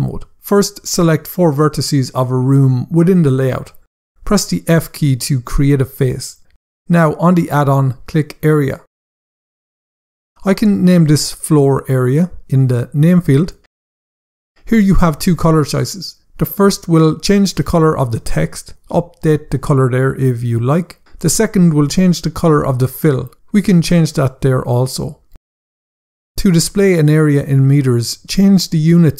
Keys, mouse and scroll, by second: 0.7 shift+click, 2.4 shift+click, 4.7 f, 8.7 click, 9.7 scroll down 1, 10.7 click, 11.2-13.3 typing, 13.5 Return, 14.7 click, 17.7 click, 22.9 click, 24.5 click, 25.9 click, 28.9 click.